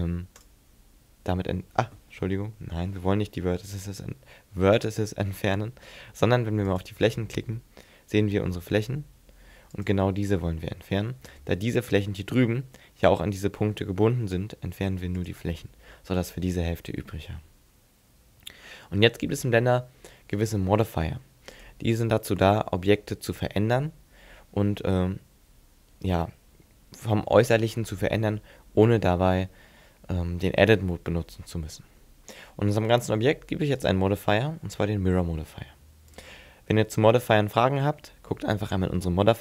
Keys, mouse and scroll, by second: 2.6 ctrl+z, 6.7 click, 9.7 click, 10.3 x, 14.2 x, 21.5 click, 33.8 click.